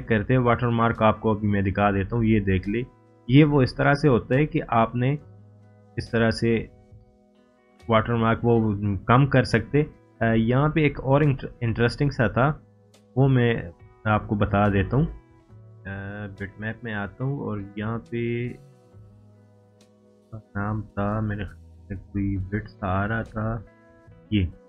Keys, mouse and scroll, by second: 2.1-3.1 drag, 6.9-7.2 scroll up 1, 9.6 click, 15.4 click.